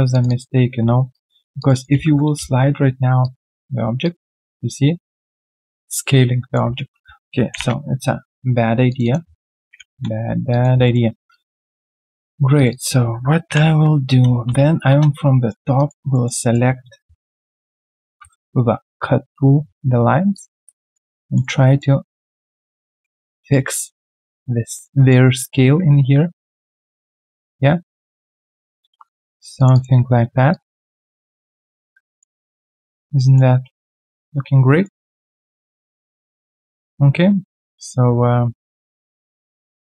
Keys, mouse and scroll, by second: 0.2 double click, 1.1 shift+click, 1.9-3.3 typing, 1.9 double click, 7.5 ctrl+Delete, 9.0 double click, 9.7 ctrl+Delete, 10.5 alt+click, 10.8 alt+middle click, 11.1 alt+right click, 11.3 alt+click, 12.7 double click, 13.5 ctrl+Delete, 14.9 space, 15.4 alt+middle click, 15.7 alt+right click, 16.1 alt+middle click, 16.3 alt+right click, 18.0 ctrl+shift+x, 20.3 ctrl+click, 20.7 alt+right click, 21.1 alt+middle click, 21.4 alt+right click, 22.5 alt+right click, 22.9 alt+middle click, 23.6 alt+right click, 24.6 alt+middle click, 24.9 alt+right click, 28.4 ctrl+click, 28.5-29.4 typing, 29.7 double click, 32.0 alt+right click, 32.4 alt+middle click, 32.8 alt+right click, 33.1 alt+middle click, 34.1 alt+middle click, 34.6 alt+right click, 35.1 alt+middle click, 36.6 scroll down 1, 36.6 alt+middle click, 38.4 alt+right click.